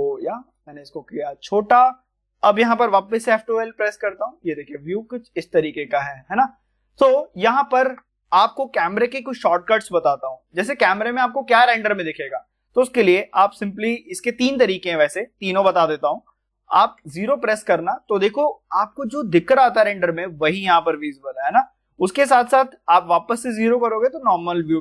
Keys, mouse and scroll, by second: 0.4 click, 3.1 F12, 5.3 click, 6.0 middle click, 7.0 click, 7.4-17.0 shift+middle drag, 24.5 shift+middle click, 24.5 middle click.